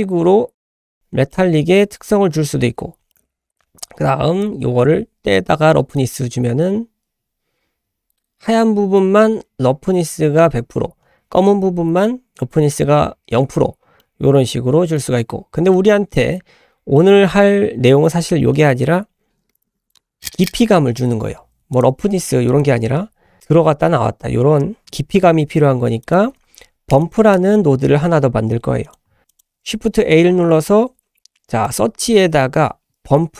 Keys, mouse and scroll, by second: 1.3 ctrl+middle click, 3.1 shift+middle click, 3.3-3.9 scroll up 5, 3.5 shift+middle click, 4.4-6.2 drag, 14.0 middle click, 15.4 scroll down 2, 15.7 middle click, 16.9 middle click, 18.1 scroll down 1, 18.5 middle click, 19.5 ctrl+right click, 21.7 click, 21.9 g, 22.5 click, 26.0 click, 26.3 a, 27.0 click, 28.0 shift+a, 29.3 click, 29.7 shift+a.